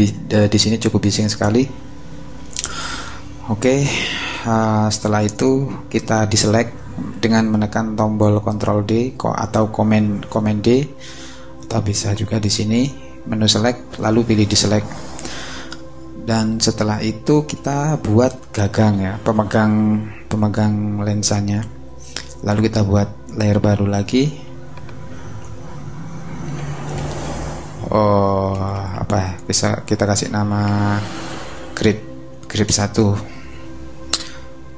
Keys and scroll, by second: 26.3-27.5 typing, 28.5 BackSpace, 29.7-31.1 typing, 32.3 space, 32.4 l, 32.6 Return.